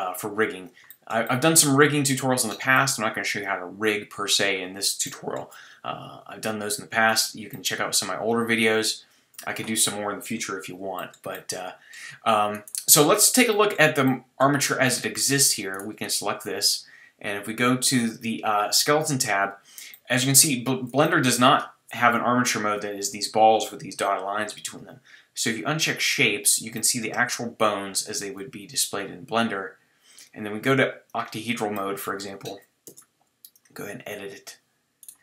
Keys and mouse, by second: 1.7-3.4 middle drag, 3.4-5.3 drag, 5.3 middle click, 7.2-10.1 middle drag, 11.1-11.8 middle drag, 12.6-17.9 middle drag, 17.9-19.9 drag, 19.9 middle click, 21.1 middle click, 26.7 click, 26.9-27.4 middle drag, 27.4 click, 27.7 middle click, 31.7 middle click, 32.8 Tab, 35.0 click.